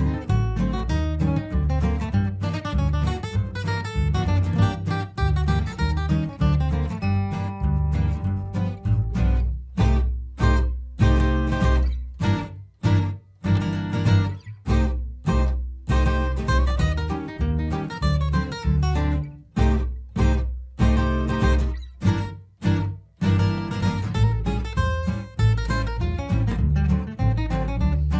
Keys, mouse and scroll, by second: 7.1-8.8 shift+drag, 8.8 F2, 9.0-12.0 drag, 14.6 shift+Page_Up, 15.2 click, 15.8 shift+Page_Up, 16.3 click, 16.5 shift+Page_Up, 17.0 click, 19.0 shift+Page_Up, 19.6 Escape, 19.8-26.5 drag, 26.7 ctrl+r, 27.4-28.1 drag.